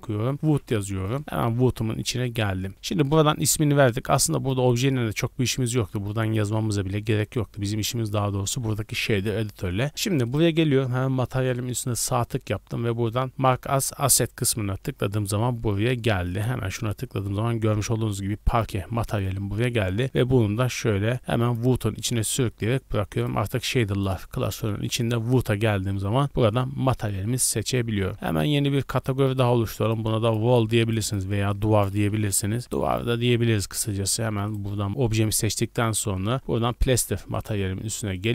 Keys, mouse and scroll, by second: 0.7 o, 4.2 click, 10.2-14.5 right drag, 16.3 click, 17.1-17.5 scroll up 2, 19.2 click, 23.1 click, 28.9 click, 29.8 click, 30.2 click, 30.8 click, 31.0-32.8 drag, 34.5-36.4 right drag, 37.3-37.7 right drag, 38.1-38.3 right drag.